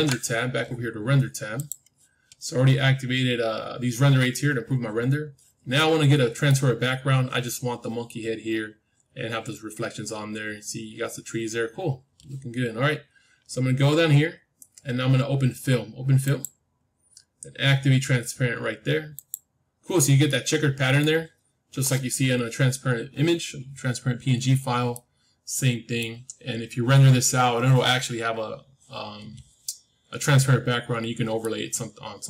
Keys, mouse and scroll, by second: 1.5-3.5 drag, 5.7-7.7 middle drag, 7.7-8.5 scroll up 1, 8.5-9.1 scroll up 1, 9.1-9.9 scroll up 1, 9.9-11.5 scroll up 1, 11.5 middle click, 12.0-15.7 scroll down 1, 16.2-18.2 drag, 18.2 middle click, 19.1-21.1 drag, 20.2-22.2 middle drag, 24.0-28.6 middle drag, 30.5-32.2 middle drag, 30.5-31.3 scroll up 1.